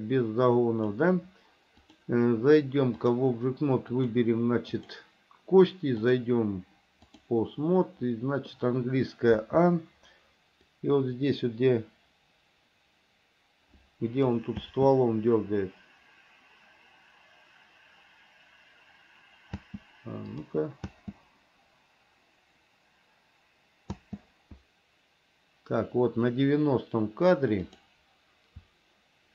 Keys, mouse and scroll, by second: 2.0-3.4 drag, 4.1 click, 4.9 click, 6.2-7.5 drag, 9.6 a, 10.9-14.6 drag, 14.8 space, 19.8 space, 20.5 click, 21.0 space, 24.1 space, 27.9 click.